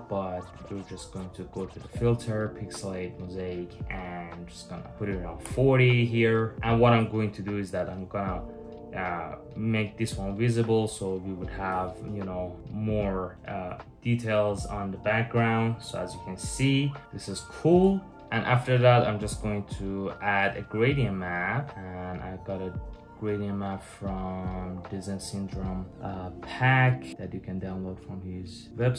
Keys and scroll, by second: 5.0 Return.